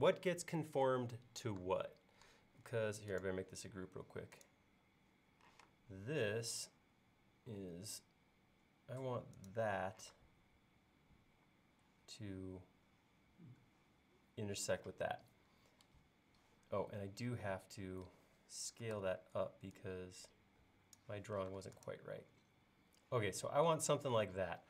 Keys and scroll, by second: 5.6 m, 10.2 space, 19.0 s, 21.5 space.